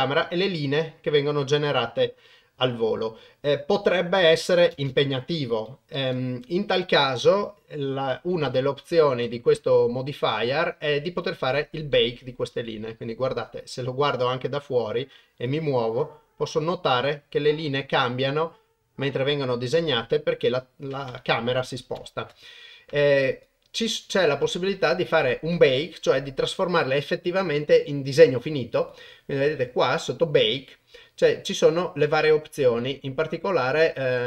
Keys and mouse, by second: 4.8 shift+space, 6.0 shift+Left, 8.4 KP_0, 11.9-13.4 middle drag, 13.7 click, 15.5-21.4 drag, 21.9 shift+Left, 23.3 click, 23.9 click, 28.8 click.